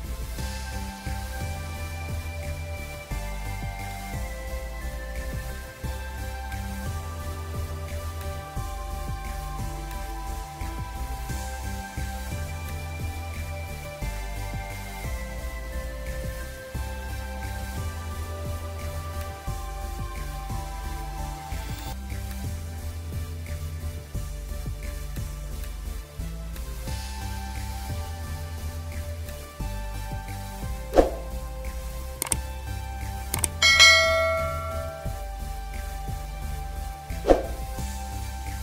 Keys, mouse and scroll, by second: 3.5 v, 5.1 scroll down 1, 6.4 alt+click, 7.3 scroll up 1, 14.1 Return, 14.7 scroll up 1, 15.3-16.6 scroll down 1, 16.9 ctrl+j, 17.9 ctrl+b, 29.2 alt+click, 29.9 scroll up 1, 32.1 ctrl+m.